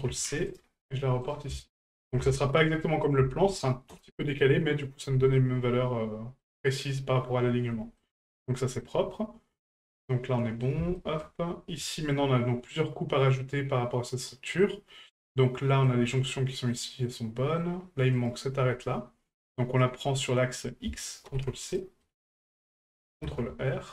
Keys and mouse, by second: 1.2 right click, 1.6 alt+shift+right click, 1.9 alt+shift+right click, 3.0-4.0 ctrl+drag, 5.3-6.4 middle drag, 7.7 middle drag, 8.5 shift+middle drag, 9.1-10.6 middle drag, 11.0 shift+middle drag, 11.9-15.8 middle drag, 16.3-16.7 middle drag, 17.1-17.6 middle drag, 18.1 right click, 20.8-21.8 ctrl+drag, 22.0 middle drag.